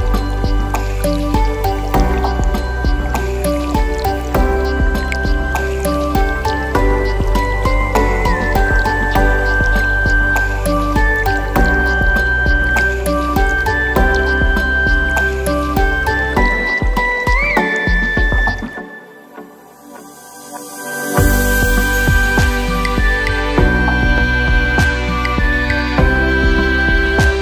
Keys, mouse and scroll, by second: 0.3 click, 0.9 click, 2.1 click, 2.7-3.4 drag, 4.7 KP_7, 5.1-5.9 scroll up 4, 5.9 click, 6.5-7.2 drag, 7.6 click, 8.1-8.7 drag, 9.5 KP_1, 10.6-11.2 shift+middle drag, 11.4-11.8 scroll up 1, 11.8 click, 12.6 r, 13.9 click, 14.3 click, 14.5 r, 15.3 click, 15.7 click, 16.1 r, 16.6 click, 17.4 KP_3, 18.0 click, 18.8 r, 19.3 click, 19.8 click, 20.5 r, 21.8 click, 22.2 click, 23.0 r, 25.4 click, 25.8 scroll down 1, 26.1-27.4 middle drag.